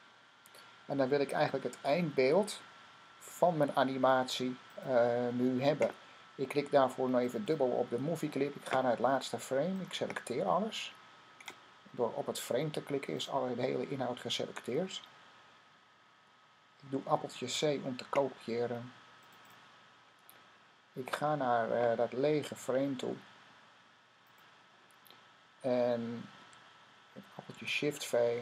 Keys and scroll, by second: 17.2 c, 27.4 v.